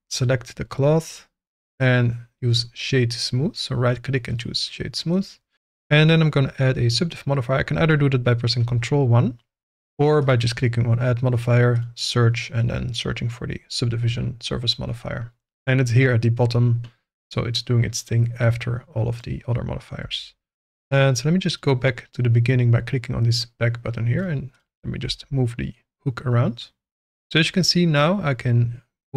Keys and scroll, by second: 8.6 ctrl+1, 14.7 Escape, 20.0 g.